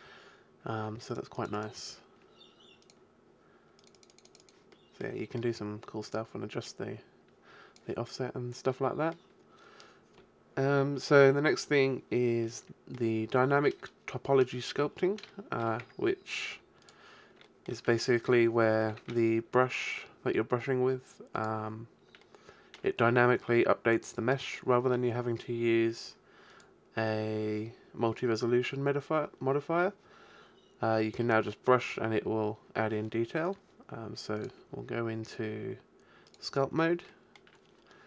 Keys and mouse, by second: 1.1 click, 4.7-7.6 drag, 8.0-10.0 middle drag, 12.5-14.3 middle drag, 15.3 shift+middle click, 15.8 Tab, 16.5 x, 19.0 shift+a, 24.7-25.9 middle drag, 28.3 middle click, 31.5-33.5 middle drag, 37.1-38.0 middle drag.